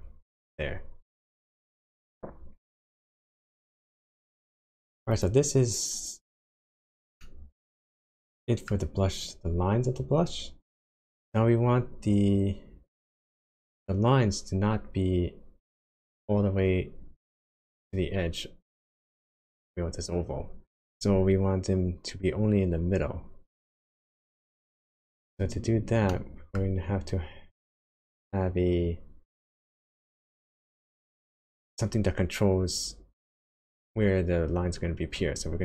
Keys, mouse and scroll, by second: 1.3 click, 5.1 click, 6.3-7.0 scroll down 3, 7.2 middle click, 8.9-9.2 scroll up 1, 25.0 click, 25.4-25.8 scroll down 3, 26.1 middle click.